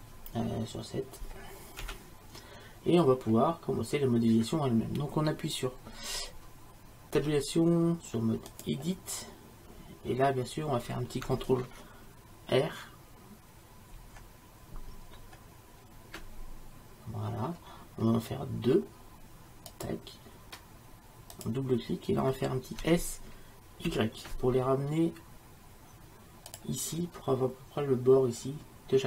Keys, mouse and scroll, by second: 1.9 KP_7, 7.2 Tab, 14.0 ctrl+r, 22.9 s.